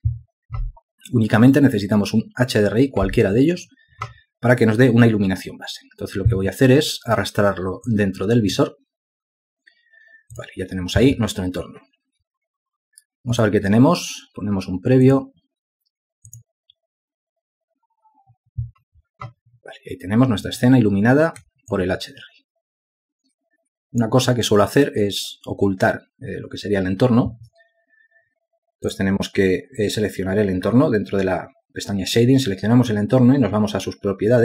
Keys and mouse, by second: 22.9 alt+click.